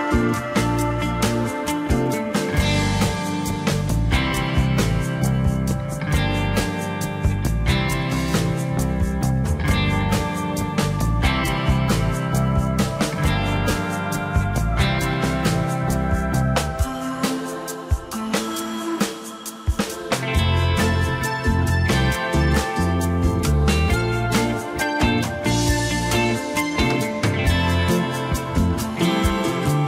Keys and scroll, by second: 12.9 F9, 13.0 Tab, 18.2 Delete, 19.8-21.5 typing.